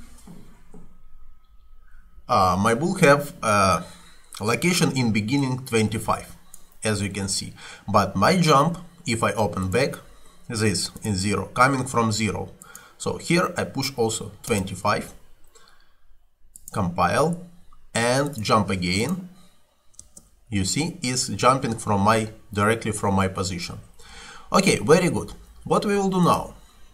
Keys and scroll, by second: 13.7-14.6 typing, 20.1 space, 21.6 Escape.